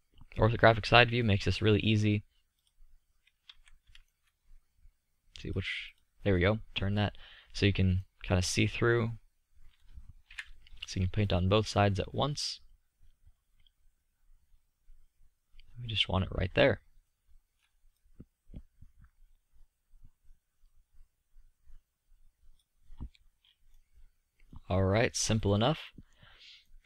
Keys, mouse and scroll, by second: 3.5 z, 7.7-9.4 middle drag, 10.3 KP_3, 17.3 middle drag, 20.1-23.8 middle drag.